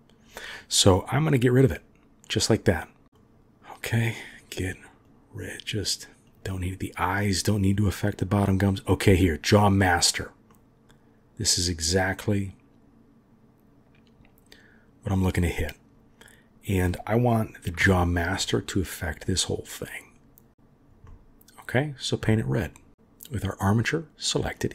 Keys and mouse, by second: 1.8 click, 3.0 middle click, 4.4 click, 5.1 click, 5.5 click, 6.6 click, 10.5-14.4 middle drag, 14.4 click, 17.8 KP_7, 18.9-20.9 drag, 21.1 middle click, 22.2 middle click, 22.7-24.6 drag.